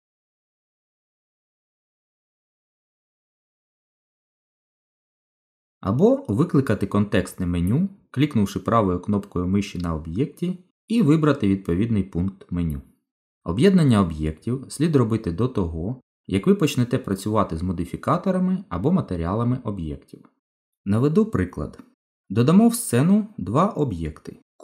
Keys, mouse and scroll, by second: 2.9 ctrl+z, 3.9 click, 4.9 click, 6.3 shift+click, 6.8 shift+click, 7.4 click, 8.6 right click, 14.9 click, 17.9 click, 19.8 Delete, 22.2 shift+a.